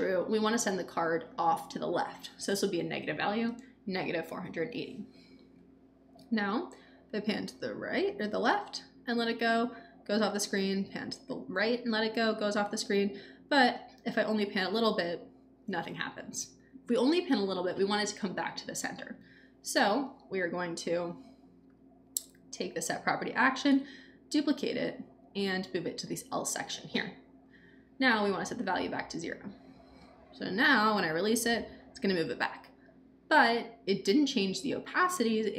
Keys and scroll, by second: 2.6 Left, 3.0 -, 3.4 Return, 23.6 super+d.